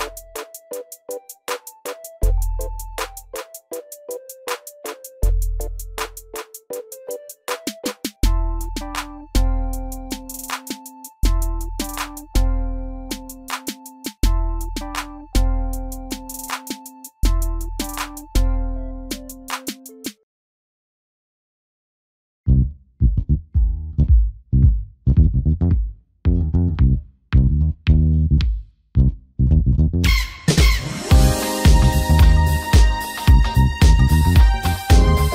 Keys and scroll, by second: 1.0 ctrl+j.